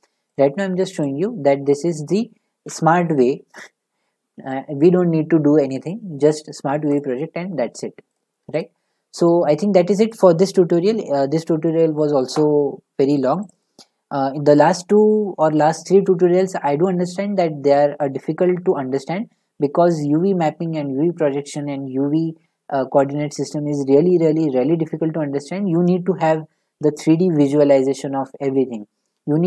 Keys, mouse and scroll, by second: 0.4 click, 1.0 click, 2.7 u, 7.0 click, 8.1 click, 8.6 click, 10.1 click, 13.5 click, 13.7 click.